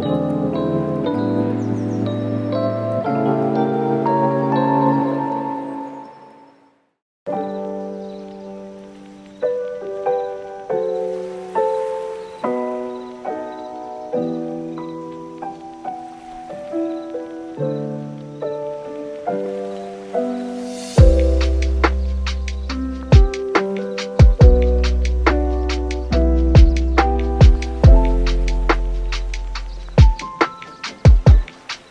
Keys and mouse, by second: 0.3 middle click, 0.9 super+s, 1.0 super+s, 3.1 click, 8.8 middle click, 9.4 super+s, 9.5 super+s, 10.1 click, 12.0 right click, 12.3 shift+click, 13.3 super+s, 13.4 middle click, 14.0 shift+a, 22.8 click, 24.1 click, 25.5 click, 28.1 n, 28.6 click, 28.8 n, 28.9 middle click, 29.7 middle click, 31.7 click.